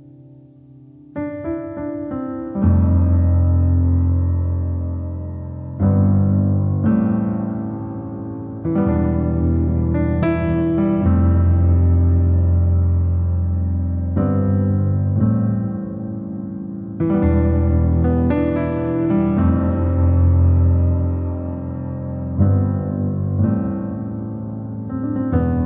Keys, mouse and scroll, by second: 0.6-0.9 scroll down 2, 0.9 shift+middle click, 1.7-3.2 drag, 3.2 shift+middle click, 4.0-8.0 drag, 8.0 shift+middle click, 8.7-12.2 drag, 12.2-13.2 shift+middle drag, 13.2-15.8 drag, 15.8 shift+middle click, 16.2-19.2 drag, 19.2 shift+middle click, 20.0-24.5 drag, 24.5 ctrl+z, 25.0 scroll down 2, 25.5 shift+middle click.